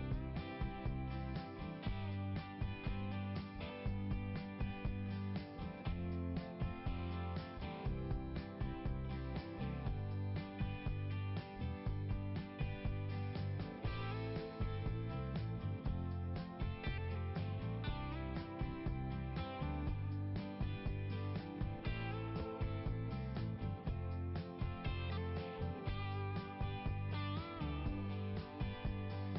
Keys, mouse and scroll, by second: 0.8 scroll up 1, 4.6 click, 4.7 click, 5.5-6.2 scroll up 1, 9.4 right click, 9.5 right click, 10.7 click, 10.9 click, 11.7 right click, 11.8 right click, 13.1 click, 13.2 click, 14.8 click, 17.9 click, 18.0 click, 19.9 click, 23.0 click, 24.2 click, 27.4 click, 27.6 click, 28.4 click.